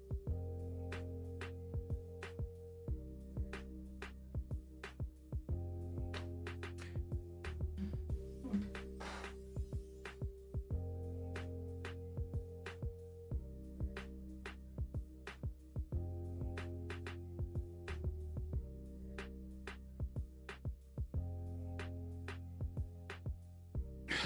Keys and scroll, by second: 8.4 Escape, 10.3-12.1 typing, 12.9 Escape, 14.0 ctrl+s, 23.8 alt+Tab, 24.0 Escape.